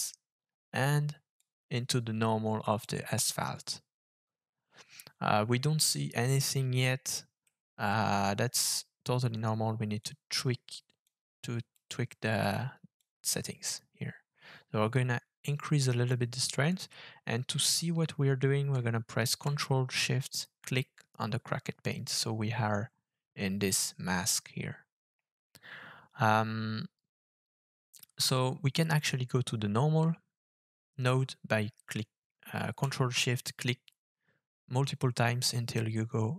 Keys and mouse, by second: 1.4-2.8 drag, 7.4-8.6 middle drag, 10.1 click, 11.0 click, 13.1-16.1 drag, 20.7 ctrl+shift+click, 28.7 ctrl+shift+click, 28.9 ctrl+shift+click.